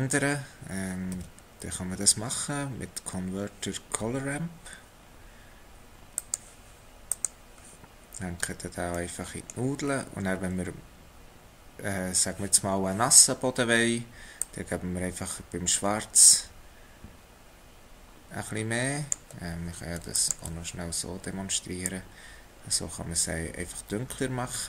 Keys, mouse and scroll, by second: 0.1-1.1 scroll up 2, 1.1 shift+a, 8.4 scroll up 2, 9.0 middle click, 9.9-13.3 scroll up 3, 14.4 click, 20.4 ctrl+shift+click.